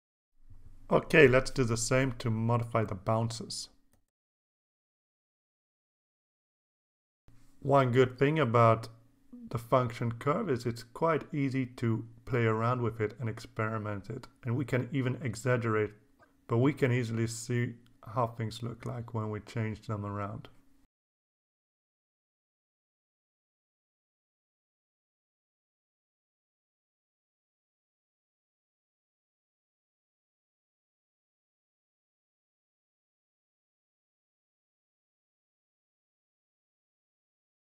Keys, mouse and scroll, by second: 1.2 click, 1.8 click, 2.5 click, 3.0 click, 5.5-7.7 drag, 8.8-10.9 drag, 11.8-14.2 drag, 15.3-18.0 drag, 18.8 click, 20.4-27.8 drag, 29.8 alt+Tab, 31.8 click, 32.8 click, 33.6 click, 34.1 click, 34.9 click, 35.7 click, 36.4 click, 37.0 click, 37.5 click.